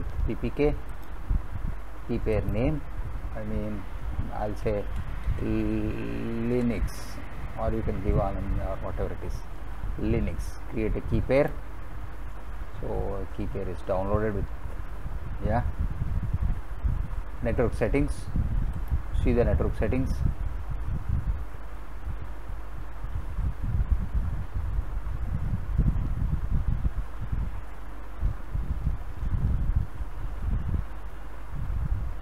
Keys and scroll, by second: 4.2-6.5 typing.